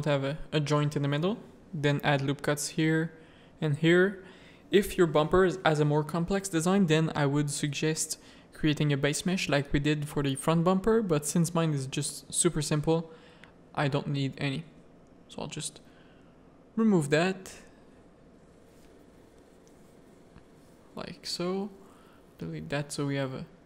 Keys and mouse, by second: 0.7 1, 1.2 ctrl+r, 3.2 ctrl+r, 6.0 2, 6.9 f, 7.3 f, 7.9 3, 8.3 click, 10.3 i, 12.4 ctrl+KP_Add, 15.8 Tab, 16.8 Tab, 16.8 a, 18.0 1, 19.8 alt+click, 20.7 x, 22.1 Tab, 23.1 alt+a, 23.5 click.